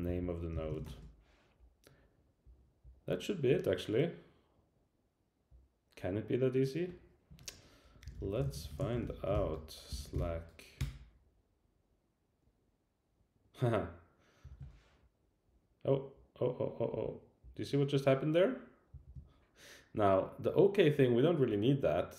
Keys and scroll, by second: 9.3 super+k, 10.8 Return.